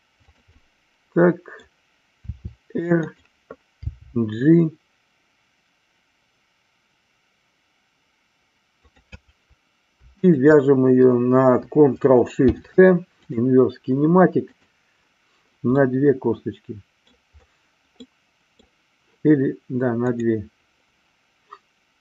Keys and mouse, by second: 0.2 click, 0.5-1.7 middle drag, 2.2 r, 3.1 click, 3.7 g, 8.8 click, 10.1-11.2 shift+drag, 15.7-17.1 middle drag, 18.1 middle click, 20.1 click.